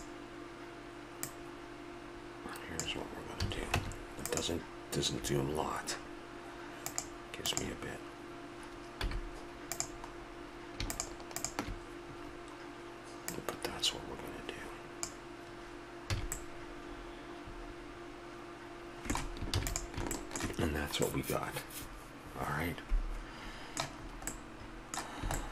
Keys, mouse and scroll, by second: 1.2-2.9 drag, 3.4 a, 3.8 Tab, 7.6-8.7 drag, 9.0 z, 10.9-12.2 drag, 12.3-16.1 drag, 16.1 a, 16.4-18.4 middle drag, 19.0-20.2 middle drag, 19.6 ctrl+s, 24.0-24.8 middle drag, 24.9-25.4 middle drag.